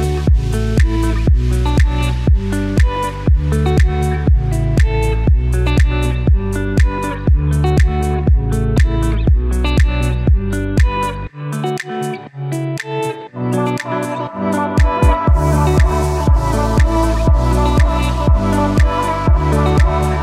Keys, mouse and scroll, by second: 12.4 i, 13.6 shift+click.